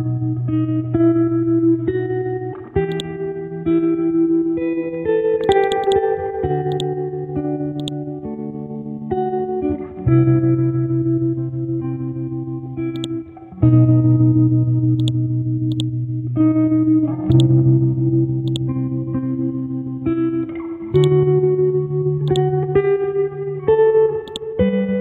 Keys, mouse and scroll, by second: 0.6 scroll up 1, 2.9-8.8 drag, 8.8 scroll down 1, 9.7 scroll up 1, 12.9-14.4 drag, 16.6 ctrl+z, 17.4-20.5 drag, 21.8 ctrl+z, 22.3 click, 23.4 F5, 23.8 Delete, 24.2-25.0 drag.